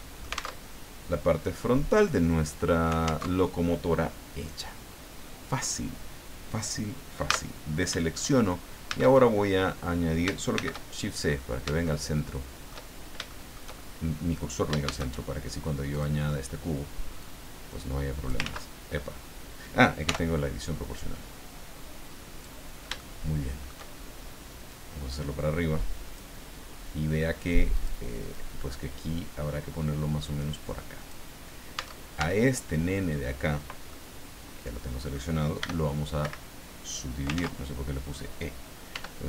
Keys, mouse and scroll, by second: 0.6 alt+Tab, 3.2 alt+Tab, 7.2 a, 8.8 shift+a, 10.5 shift+c, 11.2-11.7 scroll up 3, 11.8-12.8 shift+middle drag, 12.8 shift+scroll down 2, 13.3 shift+middle click, 14.8 shift+a, 15.9 click, 17.2-18.4 drag, 18.4 ctrl+z, 20.0 o, 20.9-22.6 drag, 23.0 shift+middle click, 24.7-26.3 drag, 27.7 click, 28.3-31.3 drag, 31.8 Tab, 33.9-35.3 middle drag, 35.6 e, 36.2 Escape, 37.3 ctrl+z, 38.9 w.